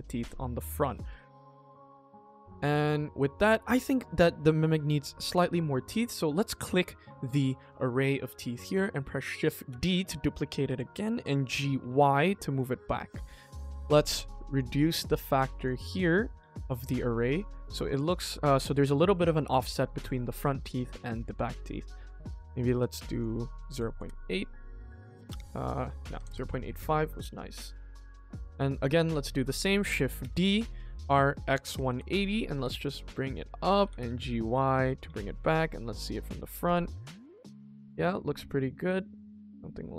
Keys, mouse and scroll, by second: 0.2 middle click, 1.0 ctrl+s, 3.0 middle click, 4.3 middle click, 5.1 click, 5.6 middle click, 7.8-8.8 middle drag, 9.6 shift+d, 11.4 g, 12.5 KP_1, 13.3 shift+middle click, 14.4 click, 15.5 click, 16.8 scroll up 2, 17.1 middle click, 18.0 middle click, 19.6 shift+middle click, 20.0 ctrl+s, 20.6 KP_1, 21.1 click, 22.1 click, 22.8-23.9 drag, 25.3 click, 27.2 click, 27.7 ctrl+s, 28.1 click, 28.5 scroll down 1, 28.8 middle click, 30.1 shift+d, 30.9 r, 32.5 g, 33.4 middle click, 33.8 g, 35.0 KP_1.